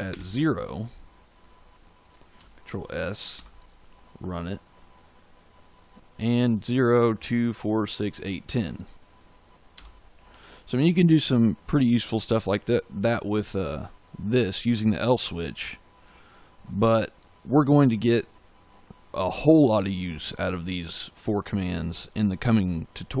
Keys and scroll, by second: 0.0 0, 2.3 ctrl+s, 3.3 ctrl+shift+z, 9.7 f.